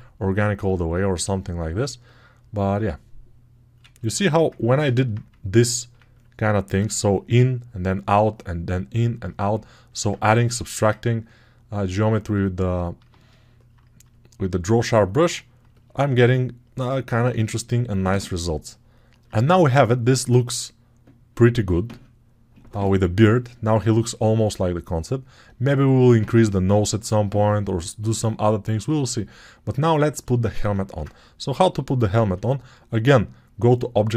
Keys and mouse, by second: 5.2-9.8 ctrl+drag, 15.9-34.1 alt+drag, 30.6 ctrl+Tab, 32.0 shift+a.